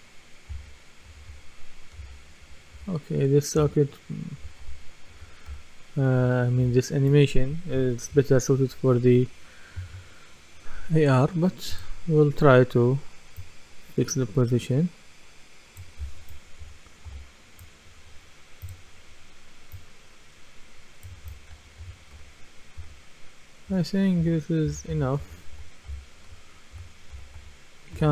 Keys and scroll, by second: 0.0-2.0 typing, 16.6-17.1 typing, 21.0-25.7 typing.